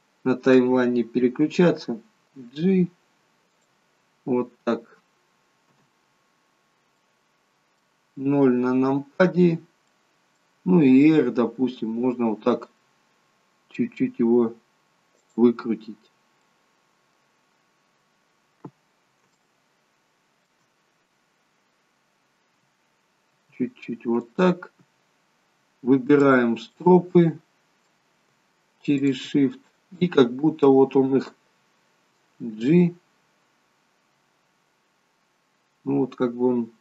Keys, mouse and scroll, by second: 2.6 g, 5.8 KP_0, 7.1 middle click, 10.0 middle click, 11.1 r, 15.8-16.4 scroll up 8, 16.5 middle click, 18.2 scroll up 1, 18.6 scroll down 2, 19.4 shift+middle click, 20.9 scroll up 1, 22.0 scroll down 1, 23.4 r, 25.3 scroll up 3, 26.1 click, 26.9 middle click, 29.0 shift+click, 29.6 middle click, 32.7 g.